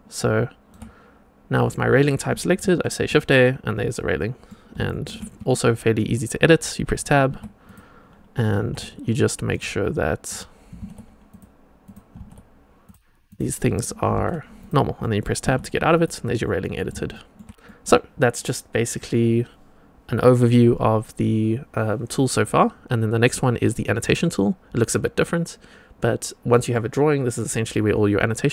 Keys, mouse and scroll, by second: 2.6 shift+a, 3.1-4.4 middle drag, 4.8 shift+middle drag, 5.3 Tab, 7.2 1, 7.6 click, 8.5 g, 10.2 click, 10.6 g, 11.8 click, 12.1 g, 13.2 click, 14.0 g, 14.9 click, 14.9 middle click, 15.4 Tab, 15.9 click, 16.3 click, 16.3 middle click, 17.1 shift+click, 17.1 shift+middle click, 17.6 middle click, 23.9 click, 26.5 middle click.